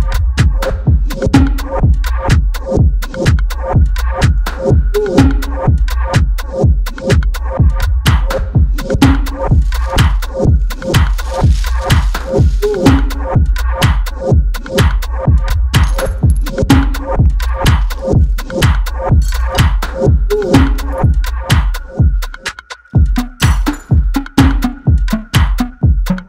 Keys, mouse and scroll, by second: 5.6 click, 11.9 click, 11.9-12.4 typing, 12.4 click, 12.7 shift+Down, 18.4 click, 20.0 ctrl+space, 20.2 ctrl+click, 20.4 ctrl+space, 22.4 click, 22.5-22.9 space, 23.4 ctrl+space, 23.6-24.2 ctrl+click, 23.8 ctrl+space, 24.3 click, 24.5-25.3 space.